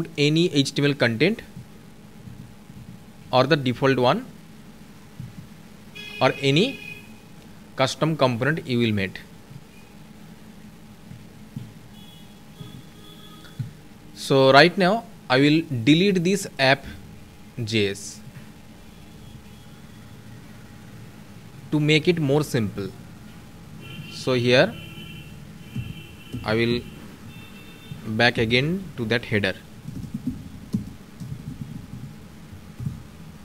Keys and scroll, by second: 3.7 ctrl+s, 33.1 ctrl+s.